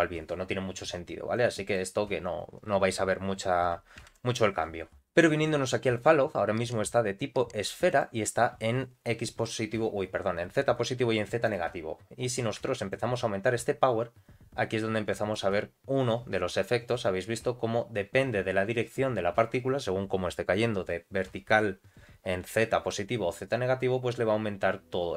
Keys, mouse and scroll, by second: 1.3 click, 4.1 shift+Left, 7.8-11.5 drag, 12.9-15.4 shift+drag, 15.7 scroll down 2, 17.4-18.0 scroll up 1.